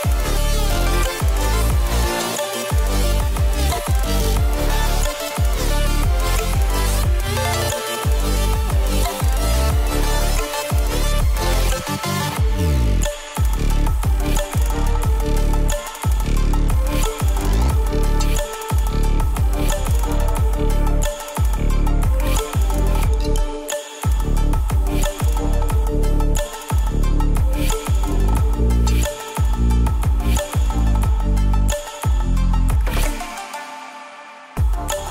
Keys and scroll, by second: 22.8 ctrl+z.